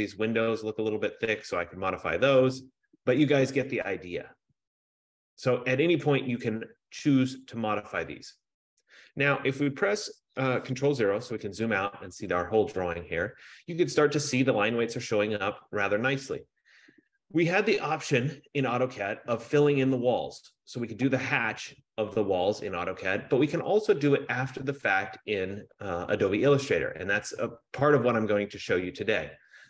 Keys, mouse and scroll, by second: 1.1-2.7 middle drag, 3.1-5.2 middle drag, 3.1-5.1 scroll, 5.1 scroll, 5.9 scroll, 6.7-9.1 scroll, 11.0 ctrl+0, 27.3 F15.